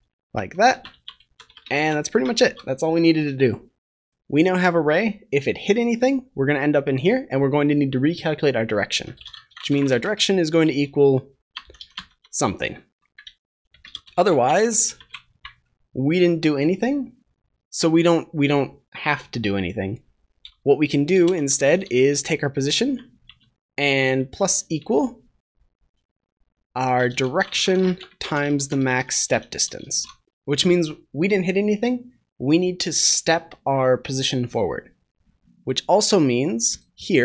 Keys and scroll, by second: 2.3 ctrl+s, 29.2 ctrl+s, 29.4 Return, 29.7 ctrl+s.